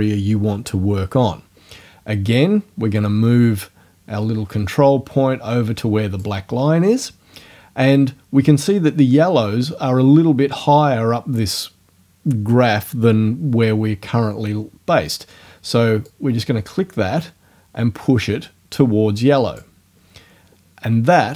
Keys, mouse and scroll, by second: 3.0 click, 16.1 click.